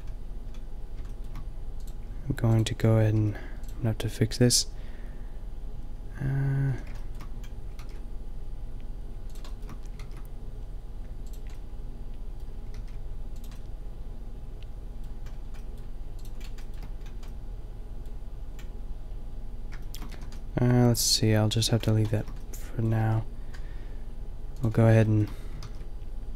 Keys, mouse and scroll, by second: 3.2 g, 6.6 a, 7.9 ctrl+r, 10.1 ctrl+r, 12.8 ctrl+r, 16.9 middle click, 20.1 middle click, 20.2 a, 22.0 middle click, 22.2 middle click, 23.0 ctrl+r, 24.6 click, 25.7 ctrl+r.